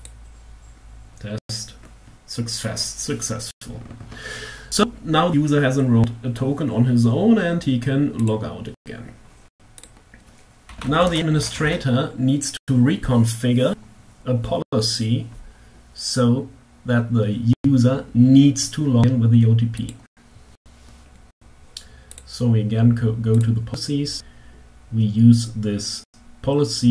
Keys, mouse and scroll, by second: 7.9 click, 9.2 click, 10.2-11.3 typing, 10.7 Tab, 19.4 click, 21.4 click, 22.7 click, 26.7 click.